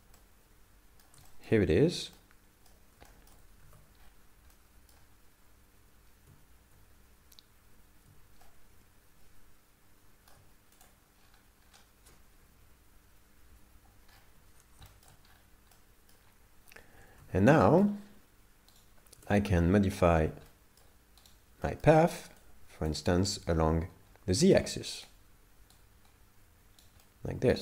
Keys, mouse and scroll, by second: 0.2 middle click, 1.3 shift+middle click, 1.8-2.3 scroll up 3, 2.2 middle click, 3.1 shift+middle click, 3.6 alt+a, 4.0-4.4 scroll up 3, 4.5 middle click, 8.4 shift+middle click, 10.8 click, 11.2-12.0 scroll down 10, 13.5 Home, 14.1 scroll up 1, 14.8-15.4 scroll up 8, 14.9 shift+middle click, 15.8 middle click, 17.2 alt+a, 17.6 shift+middle click, 18.0 scroll down 5, 18.8 right click, 19.2 Tab, 19.6 middle click, 21.2 right click, 21.7 middle click, 22.4 click, 23.3 right click, 23.4 right click, 25.0 right click, 25.8 right click, 27.0 middle click.